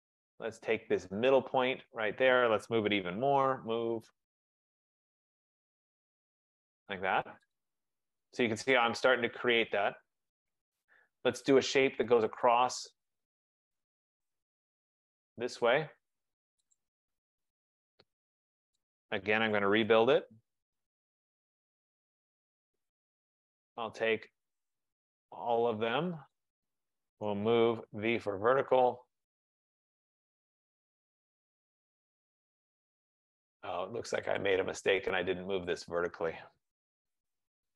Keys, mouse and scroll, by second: 0.6 click, 1.6 click, 2.1 click, 3.0 typing, 4.6 click, 6.5 click, 7.7 click, 10.8 right click, 12.6 click, 14.7 click, 16.9 click, 17.9 Return, 19.0 click, 19.6-20.5 typing, 22.5 click, 25.2 shift+click, 26.5 click, 27.3-28.0 typing, 29.4 click, 30.1 F15, 30.3-31.1 typing, 31.4 click, 33.4 right click, 34.5 click, 35.9 click, 36.7-37.5 typing.